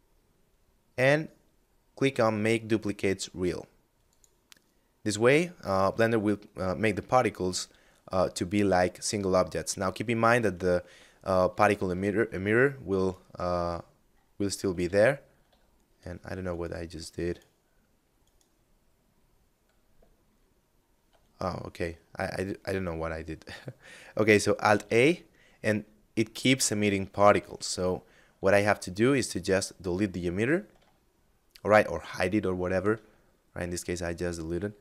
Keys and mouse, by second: 3.2 click, 7.9 right click, 10.8 alt+s, 12.0 right click, 13.9 ctrl+z, 14.6 ctrl+z, 15.5 right click, 21.1 middle click, 23.8 alt+a, 26.8 alt+a, 27.4 x, 28.3 click, 30.0 shift+middle click, 32.3 shift+middle click, 32.9 middle click, 34.7 shift+middle click.